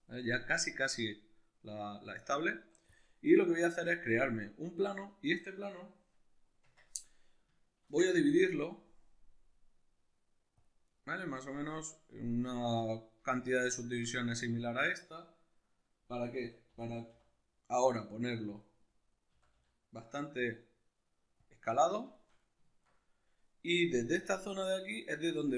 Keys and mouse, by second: 6.6 Tab, 11.0 right click, 13.8-18.6 ctrl+middle drag, 16.4 a, 18.6 click, 18.8-21.4 middle drag, 19.3 s, 21.4 click, 21.7-25.5 middle drag.